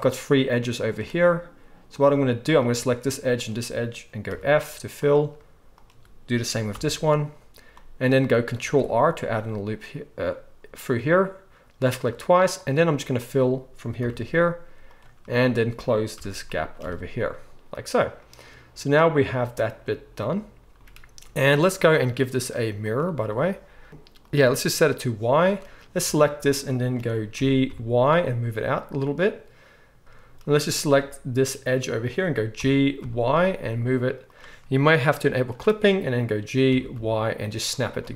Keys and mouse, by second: 1.9 click, 3.3 shift+click, 4.3 f, 4.9 click, 5.7 shift+click, 6.7 f, 7.7-12.5 middle drag, 8.6 ctrl+r, 12.5 click, 12.6 shift+middle click, 13.1 shift+click, 13.2-21.9 shift+middle drag, 14.0 f, 16.1 f, 16.8 alt+a, 21.9-23.9 drag, 23.9 middle click, 24.2 click, 24.3-35.3 middle drag, 26.0 a, 27.4 g, 30.0 ctrl+z, 32.5 g, 35.3 click, 35.4-38.1 middle drag, 36.7 g.